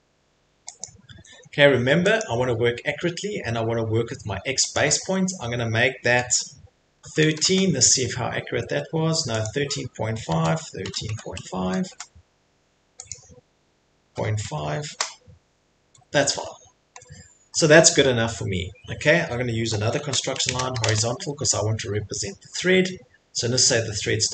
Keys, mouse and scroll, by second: 0.0-0.1 typing, 0.8 click, 1.1 Escape, 1.3 Escape, 2.2 click, 4.7 click, 7.0-7.4 typing, 9.4 click, 10.3-11.8 typing, 11.9 Return, 13.1 click, 13.1 typing, 14.2-14.9 typing, 15.8 Escape, 16.2 Return, 16.2-16.7 scroll, 16.9-17.5 scroll, 17.8 scroll, 20.1-21.3 typing, 20.4 middle click.